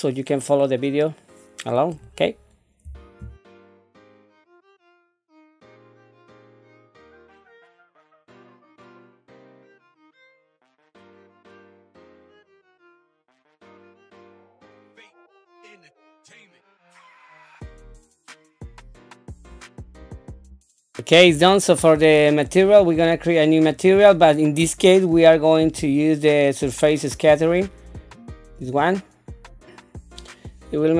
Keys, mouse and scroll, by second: 3.2-11.7 typing, 3.9 click, 4.9 click, 5.5 click, 6.3 click, 6.5 scroll down 1, 7.6 click, 8.1 click, 8.1 middle click, 8.4 scroll down 3, 8.6 shift+middle click, 8.6 click, 9.1 click, 9.4 click, 9.6 click, 9.8 click, 10.3 click, 10.8 click, 11.2 click, 11.8 scroll down 2, 11.9 click, 12.1 click, 12.8 Tab, 12.8 l, 13.0 p, 13.1 Tab, 13.2 click, 13.2 click, 13.5 ctrl+2, 13.6 click, 13.8 right click, 13.9 click, 14.1 ctrl+2, 14.3 click, 14.3 right click, 14.5-20.9 typing, 14.8 click, 14.8 right click, 15.6 click, 15.9 right click, 16.7 click, 17.2 middle click, 17.4 click, 17.4 scroll down 1, 17.6 click, 17.9 middle click, 18.1 click, 18.8 middle click, 18.9 click, 19.0 middle click, 19.1 scroll up 2, 19.2 shift+middle click, 19.2 Tab, 19.6 click, 20.0 Tab, 20.4 middle click, 20.5 scroll down 3, 20.6 shift+middle click, 20.6 scroll up 2, 20.7 click, 22.6 click, 23.7 click, 25.8-28.9 drag.